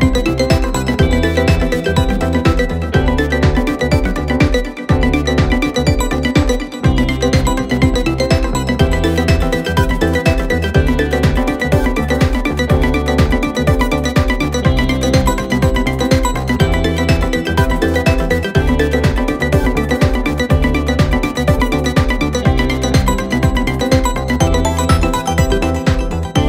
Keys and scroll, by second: 3.2 4, 4.9 3, 7.6 ctrl+d, 7.7 Escape, 10.2 ctrl+z, 11.2 ctrl+z, 11.5 Escape, 11.9 ., 15.4 4.